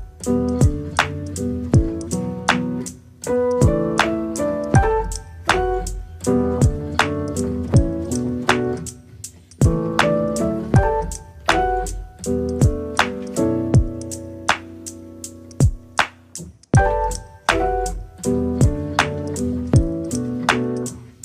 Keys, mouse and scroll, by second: 0.3-0.6 scroll down 10, 0.6 middle click, 1.2 ctrl+z, 1.6 scroll up 2, 1.8 middle click, 2.2 s, 3.4 scroll up 1, 3.6 middle click, 4.2 scroll down 3, 4.3 middle click, 5.2 shift+a, 6.2 Tab, 6.4 middle click, 7.0 click, 7.8 e, 9.1 click, 9.8 ctrl+b, 10.8 ctrl+b, 12.0 click, 12.6-13.7 middle drag, 13.7 click, 13.9 scroll down 3, 14.0 middle click, 14.4 Tab, 14.6 right click, 15.1 scroll up 1, 15.3 middle click, 16.0 scroll down 2, 16.1-16.6 scroll up 7, 16.6-17.8 middle drag, 18.0 click, 18.6 click, 19.0 middle click, 19.6 KP_3, 20.0 click, 20.7 click.